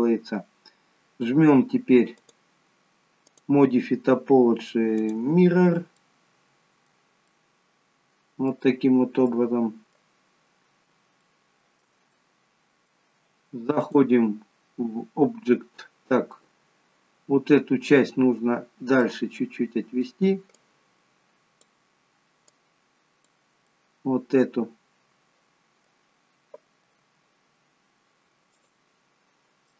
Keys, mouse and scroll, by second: 2.2 click, 3.4 click, 5.9 middle click, 7.2 middle click, 9.3 middle click, 10.3-10.9 scroll up 1, 11.3 shift+middle click, 11.3-12.2 scroll up 1, 12.2 middle click, 13.9 click, 16.3 middle click, 19.0 middle click, 20.7 click, 22.6 click, 23.7 middle click.